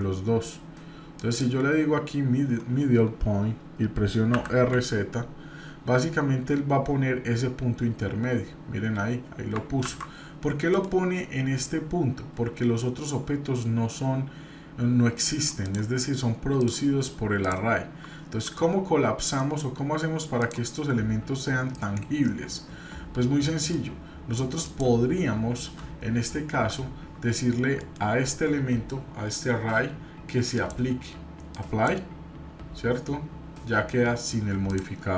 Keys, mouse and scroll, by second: 15.6 click, 16.6 click, 17.4 click, 18.6-19.4 middle drag, 20.4 click, 20.8 scroll up 2, 21.7-23.7 middle drag, 24.6 click, 27.8 right click, 30.5-31.9 drag, 34.6 click.